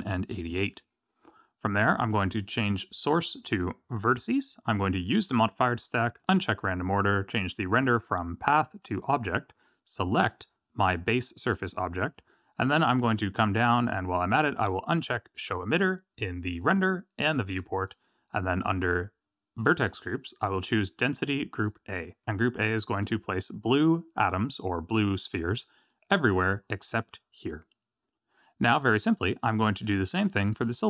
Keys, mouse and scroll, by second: 0.0 KP_8, 2.8 click, 3.5 click, 5.1 click, 6.1 click, 6.9 click, 7.7 click, 10.2 click, 12.1-13.2 scroll down 9, 15.3 click, 16.6 click, 17.5 click, 17.7-18.8 scroll down 6, 19.7 click, 20.4 click, 22.9 Tab, 25.8 middle click, 26.6-27.9 scroll up 3, 27.9 scroll down 3, 28.8 middle click, 30.5 click.